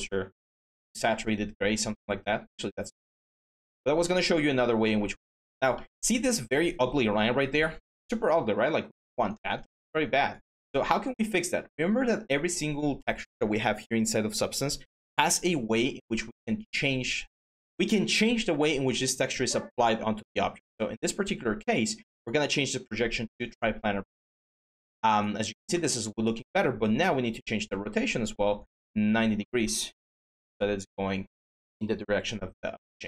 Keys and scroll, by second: 29.9 9, 30.2 Return.